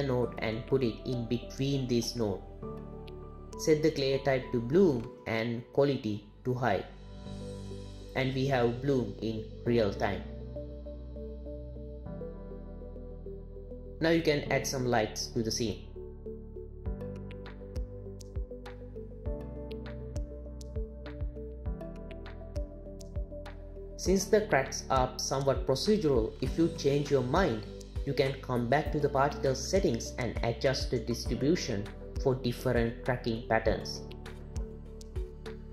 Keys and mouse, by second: 3.4-4.9 drag, 13.9 shift+a, 14.6 r, 15.4 click, 16.6-18.1 typing, 18.6 click, 20.1 click, 21.4 g, 26.6 click, 27.9 click, 29.2-29.7 drag, 30.7 click, 31.9 click, 34.9 click.